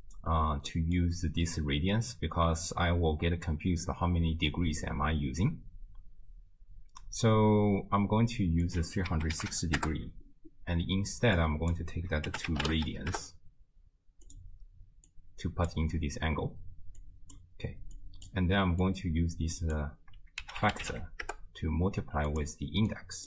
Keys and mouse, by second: 0.8 middle click, 8.7-9.8 drag, 11.4-14.4 drag, 15.1-15.7 drag, 17.0 click, 18.0 click, 19.0-22.4 drag, 23.0 click.